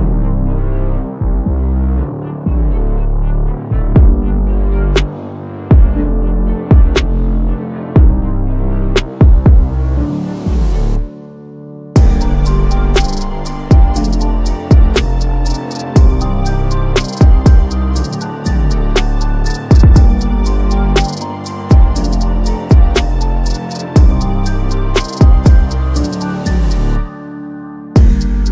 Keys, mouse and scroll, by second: 0.6 drag, 3.8 click, 5.6-6.3 click, 6.5 2, 7.0 click, 8.0 click, 9.6 click, 10.8 click, 12.6 3, 13.1 click, 15.0 click, 16.1 click, 16.8 click, 17.2 5, 17.4 click, 20.0 click, 20.6 7, 20.9 click, 22.0 click, 24.0 click, 24.6 scroll up 1, 24.8 click, 26.2-27.3 drag.